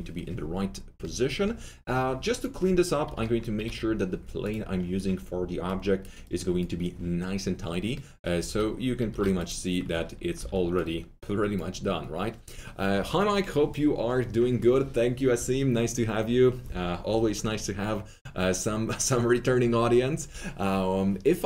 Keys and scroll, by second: 3.0 F3, 8.3 F3, 9.0 F3, 10.3 w.